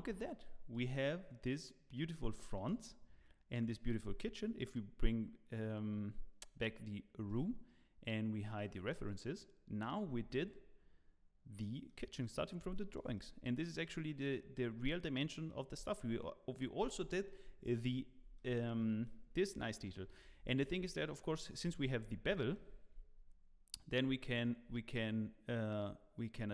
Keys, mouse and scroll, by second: 0.1 middle click, 0.7 click, 1.0 middle click, 1.6 scroll down 1, 2.4 shift+middle click, 2.7 middle click, 7.2 click, 8.6 click, 9.0 middle click, 10.0-10.4 scroll up 4, 10.3 middle click, 12.0 scroll down 2, 12.2 middle click, 12.7 shift+middle click, 13.1 middle click, 15.7-17.6 scroll up 2, 18.3 middle click, 19.7 middle click, 20.1 scroll up 1, 20.4 shift+middle click, 20.9 middle click, 21.3 click, 21.7 shift+middle click, 22.0 scroll up 2, 22.3 shift+middle click, 23.9 shift+click.